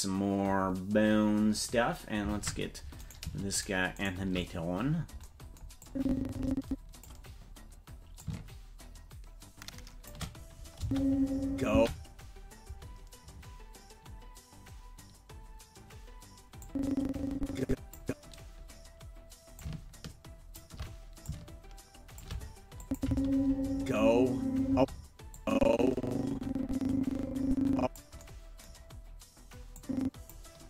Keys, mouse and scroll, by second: 1.5 click, 2.4 ctrl+Tab, 3.1 right click, 3.6 shift+right click, 5.9-7.1 drag, 8.2-10.1 shift+drag, 10.8 space, 11.7 space, 16.6-18.0 drag, 19.6-20.6 shift+drag, 21.2-22.2 shift+drag, 22.8 click, 23.0 space, 24.7 space, 25.3-28.0 drag, 29.8 click.